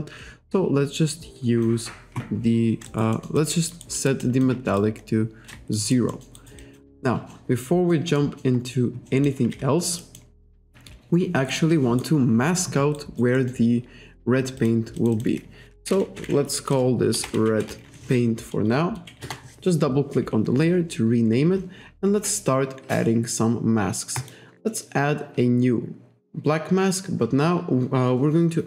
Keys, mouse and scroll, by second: 2.9 alt+right click, 3.2 alt+middle click, 3.5 alt+click, 3.8 alt+right click, 4.0 alt+middle click, 4.3 alt+click, 4.8 shift+right click, 5.8 alt+right click, 6.2 alt+middle click, 6.6 alt+click, 7.4 middle click, 8.2 middle click, 8.7-9.1 scroll up 1, 9.3 scroll up 1, 9.7-10.1 scroll down 1, 10.1 middle click, 11.6 alt+right click, 13.0 alt+right click, 13.4 alt+middle click, 14.6 click, 15.0 click, 15.9-18.4 typing, 19.3 Return, 24.2 click.